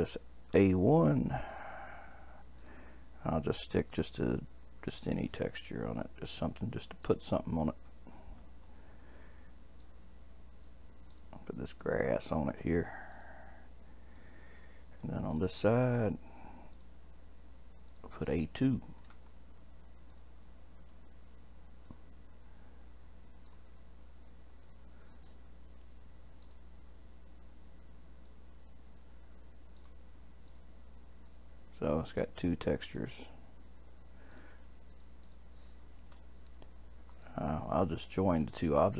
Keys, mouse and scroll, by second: 2.6-8.0 drag, 13.2 click, 14.2-15.3 middle drag, 15.3 click, 16.7-20.2 drag, 21.8-27.6 drag, 31.3-34.3 middle drag, 34.3 click, 34.9 click, 35.2 click, 37.1 click, 38.0 click.